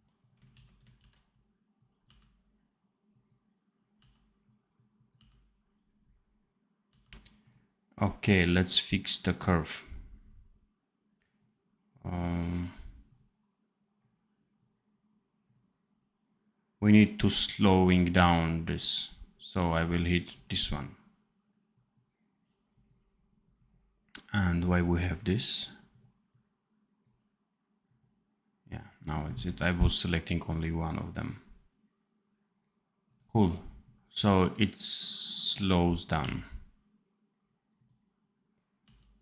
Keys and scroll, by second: 0.4 ctrl+c, 0.9 ctrl+v, 2.0 d, 3.9 d, 5.2 d, 6.8 d, 36.1 d, 38.7 d.